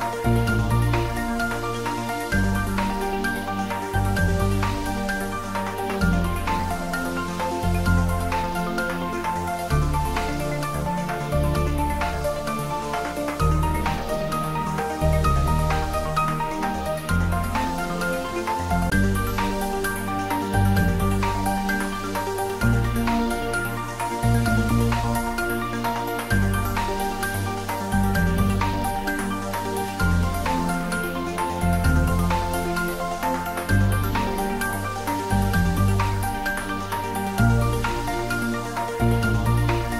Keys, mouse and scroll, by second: 0.2 3, 1.7 `, 2.2 3, 5.0-6.4 scroll up 1, 6.4-7.3 middle drag, 12.1 click, 14.9-15.7 scroll down 1, 15.7 Tab, 17.0-17.9 scroll down 1, 17.9 a, 21.8 click, 23.2-23.6 scroll up 1, 27.9 r, 28.1 r, 32.4 click, 33.1 ctrl+z, 33.7-35.6 scroll up 2, 36.7 a.